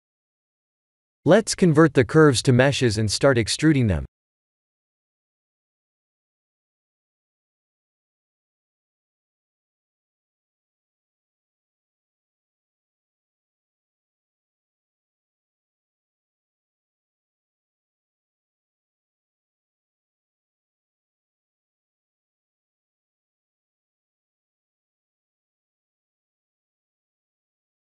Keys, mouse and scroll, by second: 0.8 click, 3.3 right click, 6.2 click, 7.2 right click, 9.1-9.9 scroll up 1, 9.9 click, 9.9 scroll up 1, 10.2 Tab, 10.5-10.8 scroll up 2, 10.8 shift+middle click, 11.0 shift+middle click, 11.5-12.6 scroll up 3, 12.6 scroll up 1, 12.6 2, 12.7 click, 13.5 x, 16.0 x, 19.6 Tab, 20.8 scroll down 1, 22.2-22.5 scroll down 7, 22.2 1, 22.7 Tab, 23.1 1.